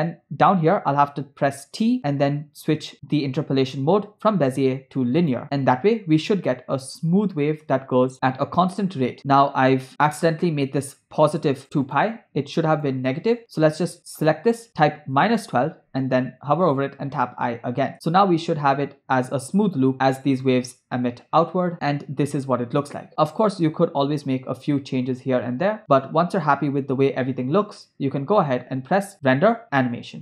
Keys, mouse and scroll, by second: 1.6 t, 6.6 click, 7.0 space, 9.6 space, 9.9 middle click, 11.2 click, 11.9-15.3 drag, 17.8 i, 17.9 space, 21.7-22.1 scroll up 3, 22.8 scroll down 1, 24.7 scroll down 1, 25.5 scroll up 1, 25.8 scroll down 1, 28.6 space, 29.2-30.2 drag.